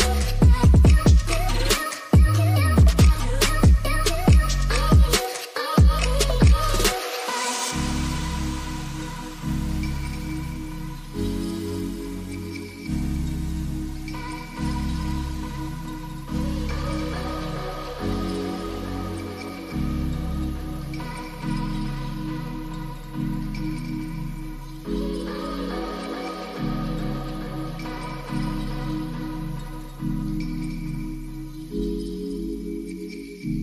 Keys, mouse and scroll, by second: 0.6-3.4 drag, 4.0-4.8 drag, 6.3-6.6 middle drag, 7.1 middle drag, 8.6 click, 11.9 click, 14.5 shift+a, 19.0-19.8 drag, 20.4 drag, 22.7 click, 24.1 shift+d, 26.8-27.8 drag, 28.7-29.6 middle drag, 30.4-32.8 drag.